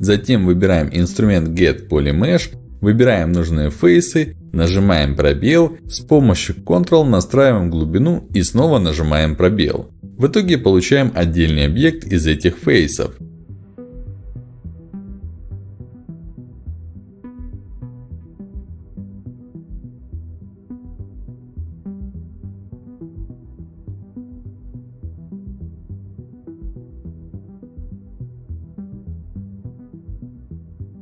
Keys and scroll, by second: 4.6 space, 5.8 space, 8.8 ctrl+alt+x, 10.8 ctrl+alt+x, 17.1 ctrl+shift+x, 20.6 space, 23.0 space, 25.4 ctrl+alt+x, 27.1 ctrl+alt+x.